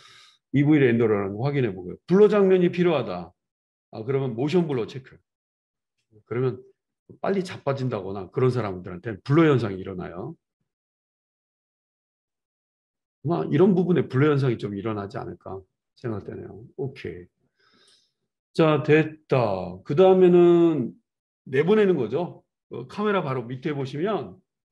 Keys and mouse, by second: 4.6 click, 4.8-9.3 middle drag, 9.3-24.6 drag.